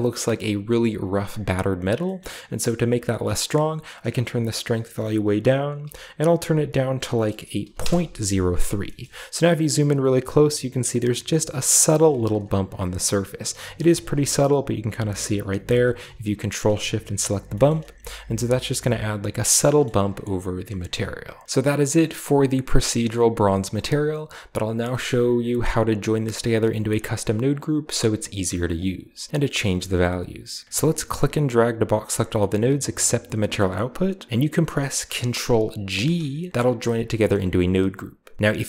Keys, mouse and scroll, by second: 1.4-2.6 scroll up 2, 1.9-3.1 middle drag, 3.1-3.9 scroll up 2, 3.9-5.7 drag, 3.9-4.6 scroll up 1, 5.9-7.5 typing, 7.7 Return, 8.8-10.0 shift+scroll up 2, 8.9-10.0 shift+middle drag, 12.2-13.0 ctrl+shift+drag, 12.8-13.2 scroll down 2, 13.4-15.4 shift+middle drag, 13.4-15.4 shift+scroll up 2, 15.4 scroll down 2, 16.2-17.3 ctrl+shift+drag, 17.3-17.9 scroll down 1, 17.4 ctrl+shift+middle click, 18.0 ctrl+shift+click, 19.1-20.8 scroll down 3, 19.7-20.8 shift+middle drag, 20.8-21.4 scroll down 1, 24.2 click, 24.6 middle click, 24.6-25.0 scroll down 1, 24.8 middle click, 27.4 click, 28.6 click, 30.8-33.6 drag, 35.8 ctrl+g, 37.2 middle click, 38.4-38.6 scroll up 2.